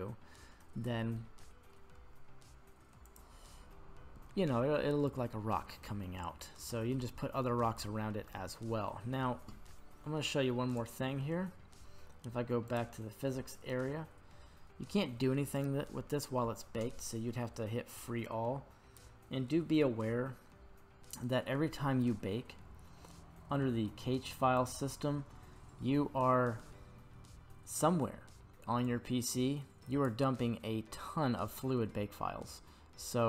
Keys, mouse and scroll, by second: 1.2-1.7 middle drag, 4.3-5.1 middle drag, 5.8-6.7 shift+middle drag, 6.9-7.4 middle drag, 7.8-8.2 shift+middle drag, 8.4-8.9 scroll down 3, 10.7 right click, 11.5-11.9 scroll down 2, 12.7 click, 13.4-14.8 scroll down 6, 17.9 click, 24.6 click.